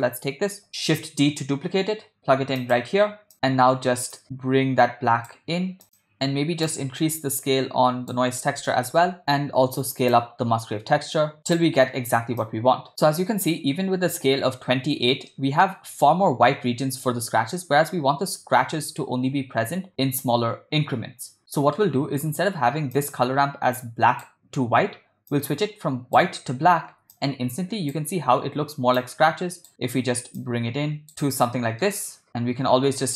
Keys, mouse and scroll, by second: 3.3 middle click, 3.3 click, 4.2 click, 6.0 middle click, 6.0 click, 6.7-8.1 drag, 10.1-11.6 drag, 12.4-12.9 drag, 12.9 middle click, 15.4 ctrl+middle click, 21.6 middle click, 23.0 click, 23.8 click, 25.3-26.2 drag, 27.1-27.9 drag, 29.0-29.7 drag, 30.4-31.3 drag, 31.6 middle click, 32.3-33.1 drag.